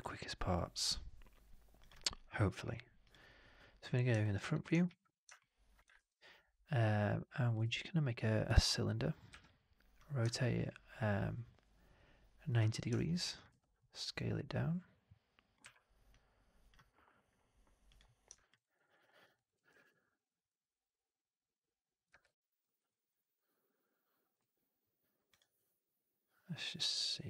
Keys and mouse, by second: 4.1-4.5 alt+middle drag, 4.7 shift+x, 5.2-5.6 alt+middle drag, 5.8 shift+x, 7.5 shift+Tab, 9.2 e, 10.1-12.4 ctrl+drag, 12.8 alt+right drag, 13.0 alt+click, 15.4 middle click, 15.5 w, 17.7 click, 18.5 alt+right drag, 18.7 alt+middle drag, 18.9 alt+middle drag, 19.2 alt+middle drag, 22.0 w, 22.7 alt+right click, 23.0 alt+right click, 23.2 alt+click, 25.2 click.